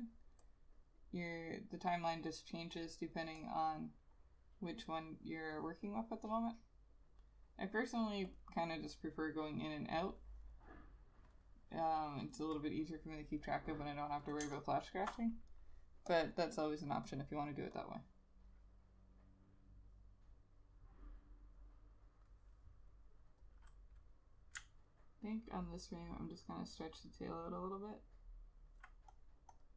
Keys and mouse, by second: 14.6 space, 23.7 double click, 25.0 alt+click, 26.1 alt+click, 27.4 alt+click.